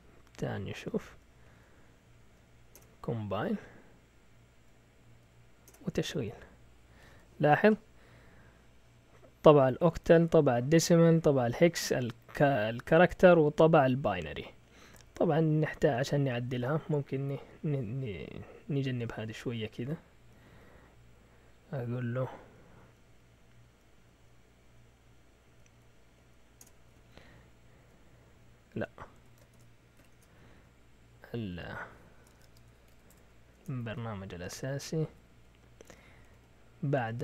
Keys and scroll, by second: 0.8-2.1 typing, 2.7 Return, 3.2 Up, 4.5 Up, 5.1 Up, 5.6 Return, 20.4 Up, 20.9 Up, 22.3 Up, 22.8 Up, 23.6-24.1 typing, 25.4-26.6 typing, 26.9 Down, 27.0 Up, 29.1 Escape, 29.1-30.0 typing, 30.1 Return, 30.5 Up, 31.2-35.0 typing, 34.0 Down, 36.4-37.2 typing.